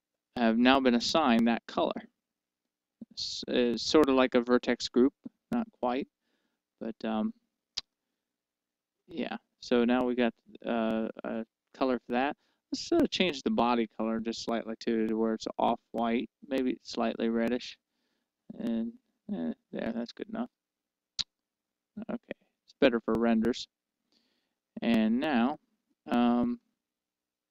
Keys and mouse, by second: 0.8-2.8 middle drag, 5.4-7.1 middle drag, 7.9-10.3 middle drag, 14.4-17.7 drag, 20.7-22.5 middle drag.